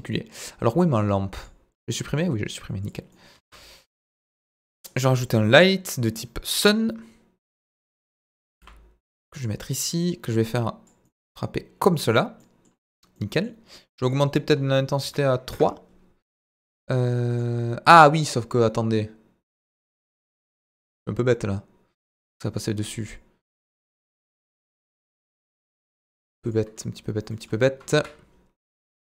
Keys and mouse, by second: 2.8-3.4 drag, 3.4-6.7 middle drag, 3.4 shift+a, 8.6 g, 9.4-11.7 drag, 11.7-13.9 middle drag, 23.4 Tab, 24.0 Tab, 24.4 Tab, 27.3 middle click, 27.9 KP_1, 28.8 z.